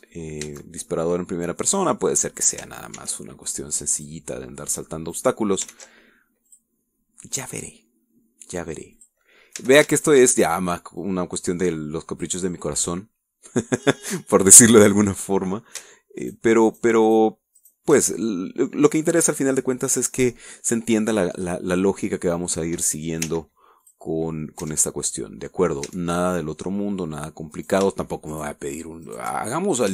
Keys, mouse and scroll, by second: 1.1 scroll up 1, 1.5 Tab, 2.0-3.3 middle drag, 4.0 ctrl+r, 5.0 click, 6.2 click, 6.7 ctrl+r, 7.5 click, 10.0 click, 10.6 a, 11.0 alt+shift+click, 11.0 alt+shift+right click, 12.0-13.4 drag, 13.5-14.8 middle drag, 14.8-15.2 scroll down 1, 15.2-16.8 middle drag, 17.2 alt+shift+right click, 17.7 alt+shift+right click, 18.1 alt+shift+right click, 18.6 alt+shift+right click, 19.1 alt+shift+middle click, 22.1-22.4 scroll up 1, 22.6 middle click, 24.3 w, 24.9 click, 25.6 Tab, 26.2 middle click, 26.9 Tab, 26.9 click, 27.2 middle click, 27.5 click, 27.6 middle click, 28.6 shift+right click, 29.4 shift+right click.